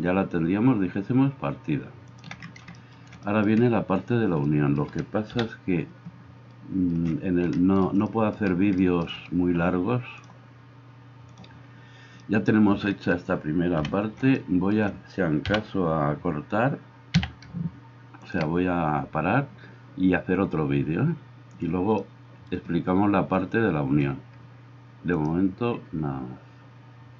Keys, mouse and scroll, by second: 2.3-10.2 middle drag, 5.3 KP_7, 11.5-27.1 middle drag, 13.8 KP_1, 15.5 g.